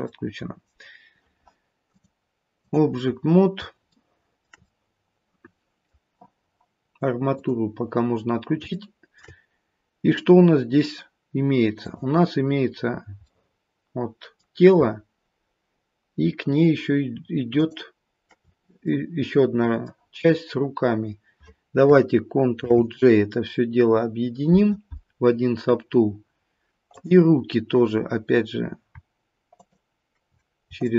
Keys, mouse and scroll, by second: 0.1 middle click, 1.8 click, 3.6 scroll up 2, 3.9 shift+middle click, 4.6 middle click, 7.3 click, 8.2-8.7 scroll down 2, 8.7 shift+middle click, 13.3 click, 13.3 middle click, 17.5 shift+click, 18.9 middle click, 22.6 ctrl+j, 26.8 click, 29.5 ctrl+click, 30.8 shift+click.